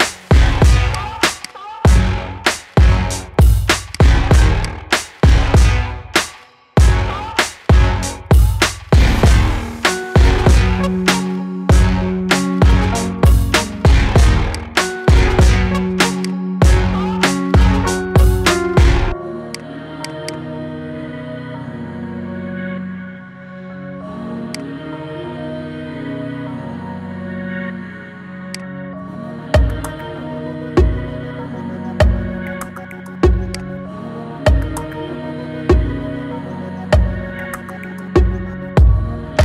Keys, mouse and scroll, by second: 0.7 alt+shift+click, 1.2 alt+shift+click, 1.7 scroll down 2, 2.0 middle click, 2.9-3.8 scroll up 3, 3.8 alt+shift+click, 4.4 alt+shift+click, 4.9 scroll down 4, 5.2 middle click, 6.1-7.3 scroll up 6, 6.4 shift+middle click, 7.3 shift+middle click, 7.8-8.2 scroll down 3, 8.2 shift+middle click, 9.0-9.3 scroll up 1, 9.3-11.6 shift+middle drag, 11.6 ctrl+b, 14.8-16.0 middle drag, 16.0 click, 16.5-17.1 scroll down 4, 17.1-18.4 scroll up 6, 18.4-19.3 scroll down 1, 19.3 click, 19.8 alt+shift+click, 20.0 alt+shift+click, 20.5 scroll down 6, 20.9 middle click, 21.8 scroll up 3, 22.2-22.7 shift+middle drag, 22.7-23.1 scroll up 2, 23.1-24.4 shift+middle drag, 24.4 alt+shift+click, 24.7-25.1 scroll down 4, 25.1 middle click, 26.0-26.7 scroll up 3, 26.7-28.3 shift+middle drag, 28.3 alt+shift+click, 28.6-29.0 scroll down 5, 29.0-29.7 middle drag, 29.7-30.1 scroll up 4, 30.1 shift+middle click, 30.7-31.1 scroll up 1, 31.1-33.4 shift+middle drag, 33.4 alt+shift+click, 33.8-35.1 scroll down 4, 35.1-36.0 scroll down 1, 36.0-36.9 scroll down 1, 36.9-38.8 scroll up 2, 38.8-39.4 scroll up 1.